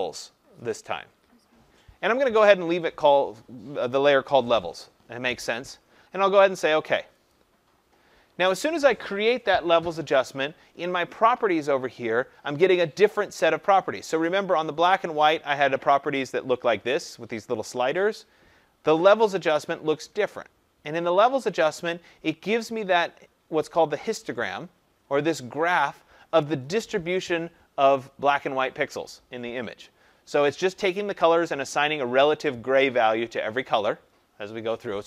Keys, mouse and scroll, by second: 1.7 click, 7.3 click, 14.6 click, 18.9 click, 19.1 click.